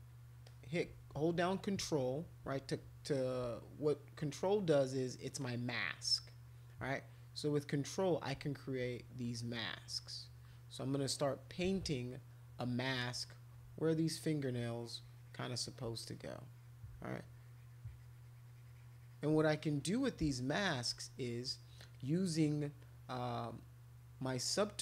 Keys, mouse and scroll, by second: 0.4 click, 3.9 click, 5.4-7.9 drag, 9.3-11.6 ctrl+drag, 11.9-13.5 drag, 14.2-15.7 ctrl+drag, 16.0 click, 17.3-19.1 ctrl+drag, 19.5 click, 21.9 click, 22.8 click.